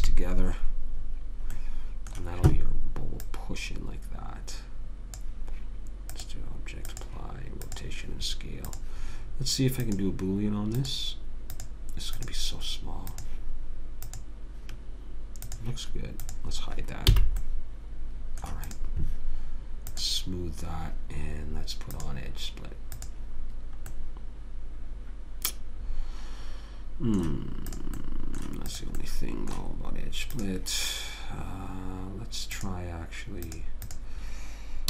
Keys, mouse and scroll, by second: 0.2 ctrl+j, 2.0 middle click, 3.6 click, 8.1 click, 9.2-15.1 drag, 15.8 click, 17.5 h, 17.8 click, 19.0-21.8 drag, 24.3-26.0 middle drag, 28.1-32.4 drag, 28.4-32.3 right drag, 32.9-34.8 drag.